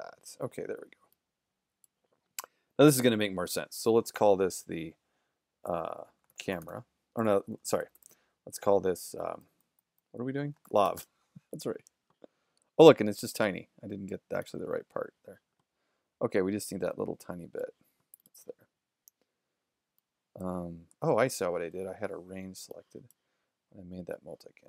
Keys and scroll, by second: 6.2-7.2 typing, 10.4-11.4 typing, 15.6 shift+z, 18.4 shift+z, 21.0 super+-.